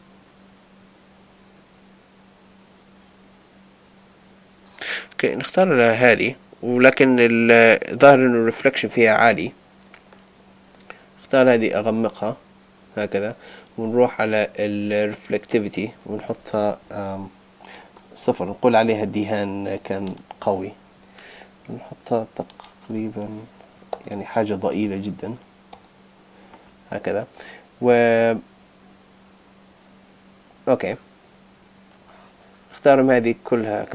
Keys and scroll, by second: 20.0 Return, 23.9 Return.